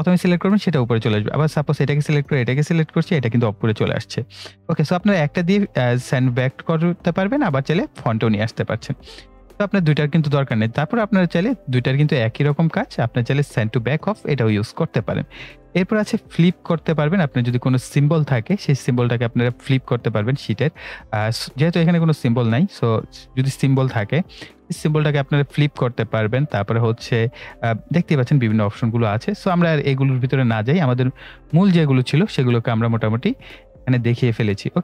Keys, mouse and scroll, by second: 1.5 click, 10.8 right click, 12.0-34.8 drag.